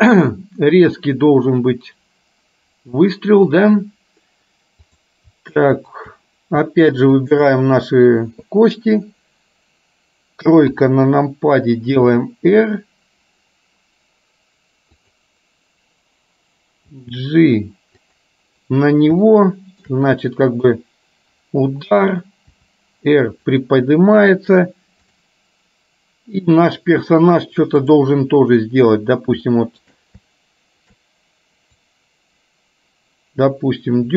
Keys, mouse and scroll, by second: 5.9 shift+click, 7.2 shift+click, 10.8 KP_3, 12.3 r, 16.9 g, 19.4 shift+middle click, 22.7 r, 25.2 click, 27.9 click, 29.7 shift+middle click, 32.5-34.1 drag.